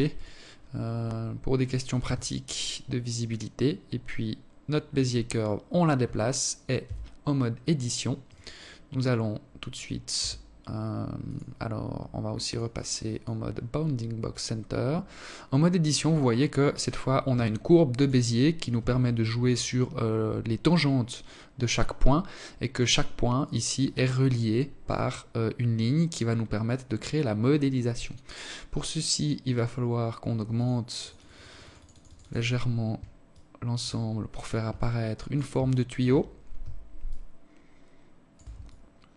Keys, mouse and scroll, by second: 0.6 g, 4.4-5.4 scroll up 2, 5.4 Tab, 6.8 right click, 8.8 r, 11.1 click, 14.7 right click, 15.9 g, 17.4 r, 23.5 right click, 29.2 click, 29.6 click, 29.8 click, 30.0 click, 30.2 click, 30.4 click, 30.6 click, 30.7 click, 30.8 click, 31.9 alt+click, 32.7 scroll up 4, 33.4 alt+click, 34.3 alt+shift+click, 35.7 shift+click, 37.2 alt+click.